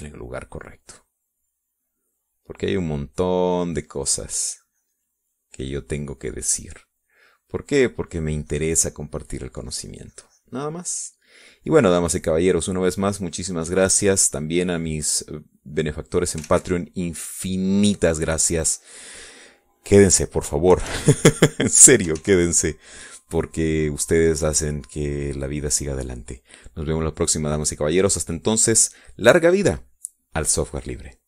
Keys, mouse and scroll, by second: 2.0-8.3 drag, 8.5-11.0 drag, 11.3-18.0 drag, 18.1 ctrl+s, 18.5-20.6 ctrl+drag, 20.6 middle click, 21.0 middle click, 21.5 click, 22.4 KP_Subtract, 23.1 click, 23.8 ctrl+s, 25.0 click.